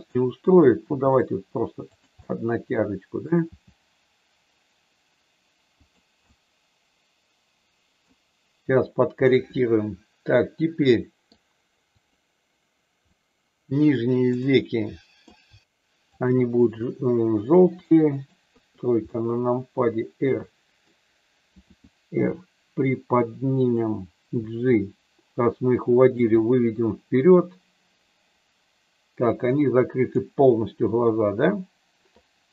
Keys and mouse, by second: 0.8 g, 2.3 middle click, 3.5 g, 5.8 click, 6.2-8.0 middle drag, 9.3-11.3 middle drag, 11.9 click, 13.0-15.2 middle drag, 16.2 shift+click, 17.8 middle click, 18.4 KP_3, 19.2-20.8 middle drag, 21.6 r, 23.5 click, 24.3 g, 26.1 click, 26.4-30.1 middle drag, 32.4 g.